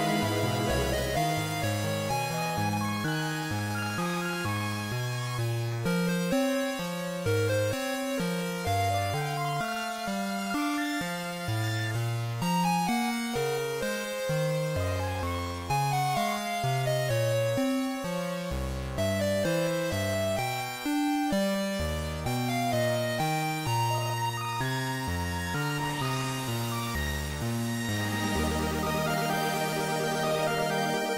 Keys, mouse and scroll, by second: 0.2 g, 3.2 click, 3.7 scroll up 3, 4.4-4.8 scroll up 2, 5.0 shift+middle click, 6.7 r, 9.4 click, 9.8 click, 11.6 click, 12.4-12.8 scroll down 1, 13.0-14.0 scroll down 3, 14.0-14.5 scroll down 1, 16.1 click, 16.1 scroll down 3, 19.9 click, 22.3 scroll down 2, 25.0 click, 27.2 click.